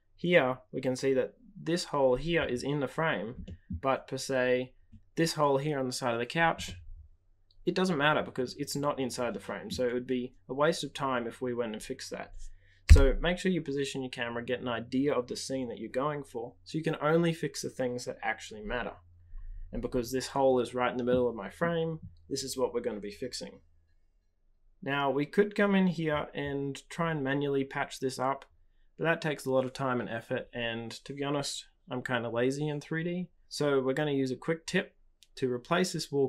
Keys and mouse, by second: 3.4 middle drag, 6.6-9.7 middle drag, 12.8 KP_0, 25.7 click.